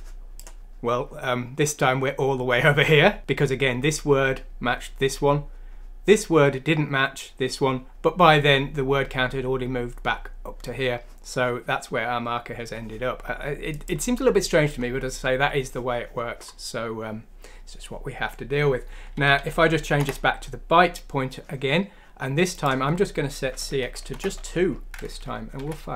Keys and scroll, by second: 19.2 ;, 24.1 BackSpace, 24.2 BackSpace, 25.5 F6.